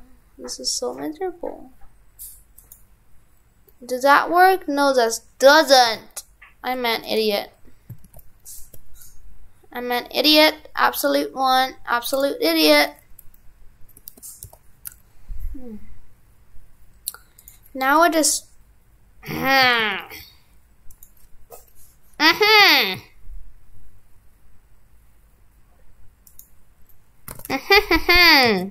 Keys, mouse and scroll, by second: 27.3 shift+f.